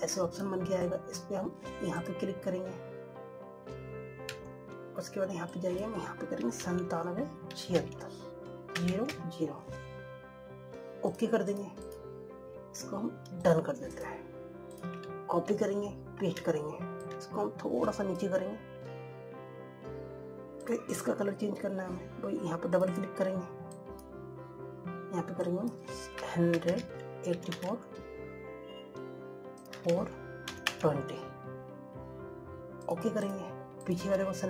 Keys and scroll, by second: 16.4 ctrl+c, 17.2 ctrl+v.